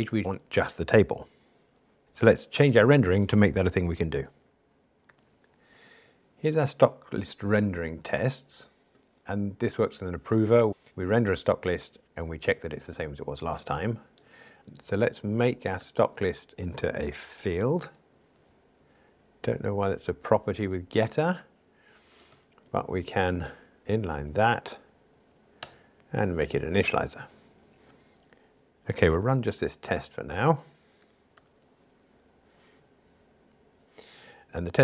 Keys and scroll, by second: 15.8 alt+super+p, 18.0 alt+super+f, 22.7 alt+Return, 25.1 alt+Return, 31.4 ctrl+shift+r.